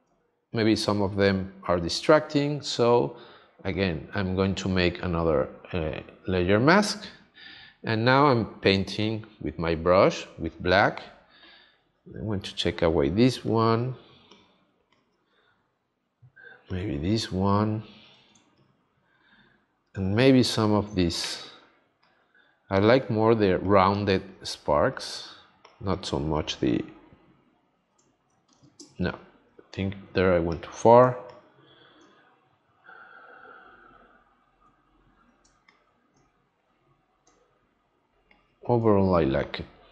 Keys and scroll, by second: 18.3 space, 28.5 super+z, 28.8 space, 31.0 space, 35.4 space, 38.1 space.